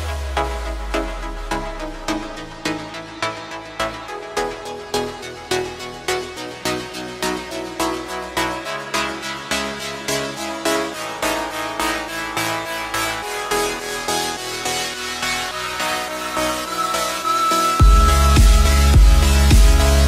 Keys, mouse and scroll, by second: 2.4 click, 3.8 shift+click, 5.0 shift+click, 6.3 shift+click, 9.0 ctrl+j, 9.7 click, 10.2-13.9 middle drag, 17.2 click, 18.1 KP_7, 18.9-20.0 scroll down 10.